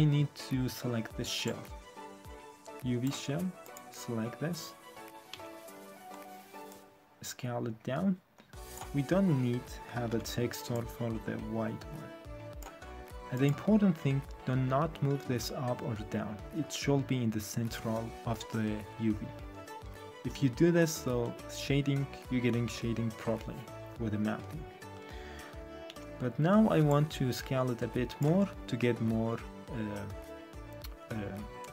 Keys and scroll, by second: 5.3 r, 10.1 w, 25.8 r.